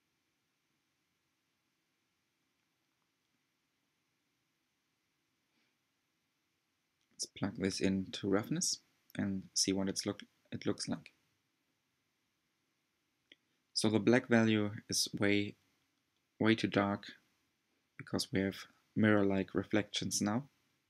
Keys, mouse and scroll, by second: 1.3 scroll up 2, 1.5-2.8 middle drag, 2.8 scroll down 2, 3.4 scroll up 1, 6.8 click, 8.4 ctrl+shift+click, 12.6-12.9 scroll up 2, 13.6-19.4 shift+middle drag, 19.4-20.8 drag.